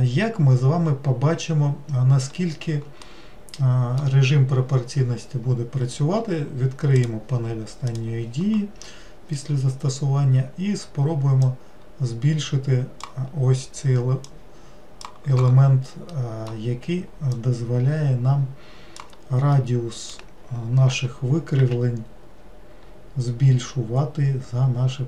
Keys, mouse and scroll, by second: 3.0-6.1 middle drag, 7.0-11.0 drag, 11.4-16.1 drag, 16.1-17.3 middle drag, 17.3-19.5 drag, 19.5-20.9 middle drag, 20.9 g.